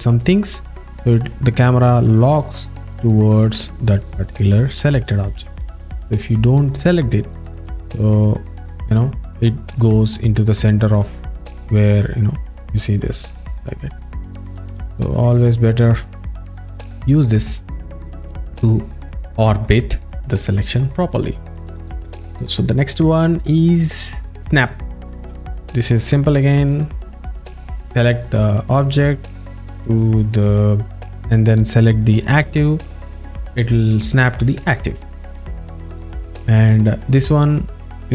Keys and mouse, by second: 0.6 click, 3.0 click, 3.2 middle click, 5.9 click, 7.4 click, 7.7 middle click, 11.2 alt+middle click, 13.3 click, 14.3 click, 14.7 alt+middle click, 21.9 click, 22.0 a, 22.6 click, 25.1 click, 26.7 shift+click, 28.1 click, 32.2 shift+click, 34.7 click, 35.6 z.